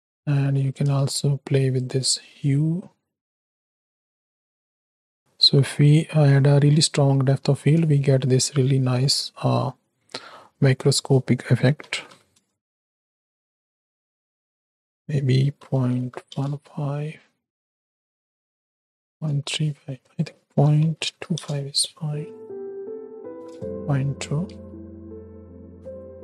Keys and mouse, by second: 0.6 middle click, 1.8-3.2 shift+drag, 3.2-4.5 shift+middle drag, 5.1 shift+middle click, 8.1 shift+middle click, 10.9-12.4 middle drag, 13.3-16.3 drag, 17.4-19.1 drag, 19.9-21.4 drag, 22.4-23.5 drag, 24.5 space, 25.7 space.